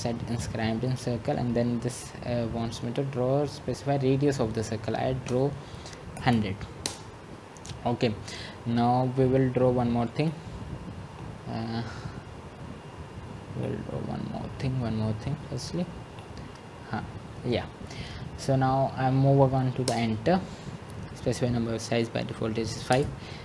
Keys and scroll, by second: 1.3-2.1 typing, 6.9-7.6 typing, 18.6-19.3 typing.